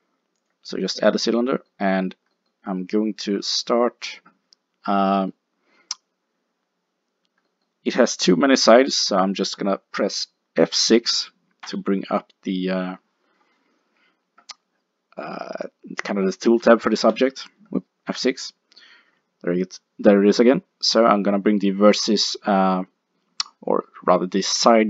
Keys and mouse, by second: 0.9-4.8 middle drag, 5.2-6.2 middle drag, 6.9 middle click, 8.4-10.0 middle drag, 11.7 F6, 18.1 F6.